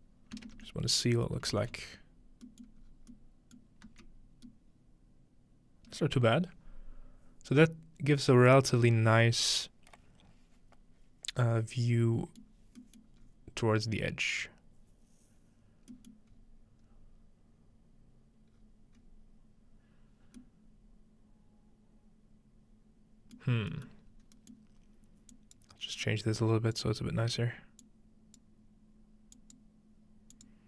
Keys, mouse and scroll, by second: 0.5 ctrl+space, 1.5 ctrl+z, 2.5-4.5 middle drag, 2.9-3.2 scroll down 1, 3.9 z, 12.4 middle click, 13.1-14.9 middle drag, 13.2-14.9 scroll up 1, 16.2-17.9 middle drag, 16.3-17.9 scroll up 1, 18.6-19.0 scroll down 1, 19.0 scroll up 1, 19.1 scroll down 1, 20.4-23.4 middle drag, 23.4 middle click, 24.1-25.3 scroll up 2, 25.3 scroll up 1, 25.3-30.6 drag.